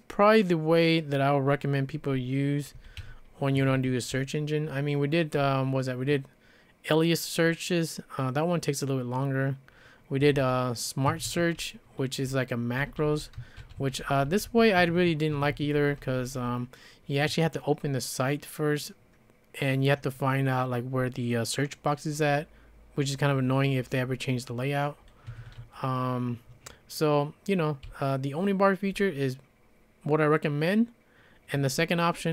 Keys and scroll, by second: 2.5-6.9 typing, 3.6 Escape, 3.7 Escape, 10.0-16.4 typing, 11.1 Escape, 11.3 Escape, 15.3 Escape, 15.5 Escape, 25.3 Escape, 25.5 Escape, 27.9 k, 28.4-28.9 k.